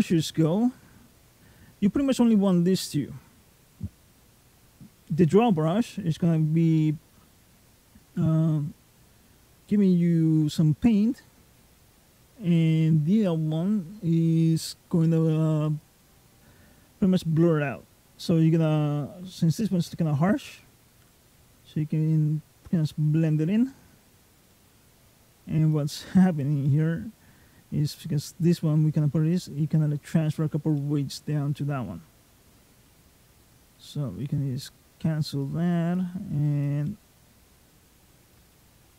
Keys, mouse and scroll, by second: 0.0 middle click, 15.5 click, 20.8 click, 24.3 middle click, 25.6 click, 26.5 middle click, 29.2 middle click, 30.6 middle click, 31.4 middle click, 33.1 click, 34.5 click, 35.8 click, 36.7 middle click, 37.5 click, 38.4 middle click.